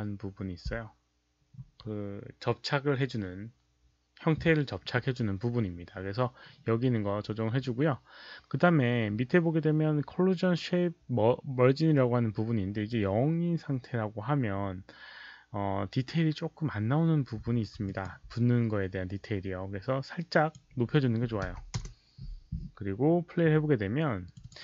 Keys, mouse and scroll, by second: 3.7 click, 17.8 alt+click, 20.2 click, 21.3 1, 21.7 Return, 24.2 alt+click.